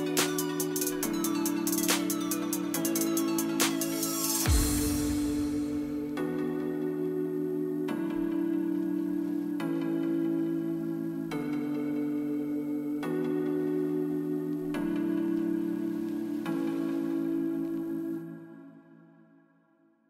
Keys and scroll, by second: 11.9 space.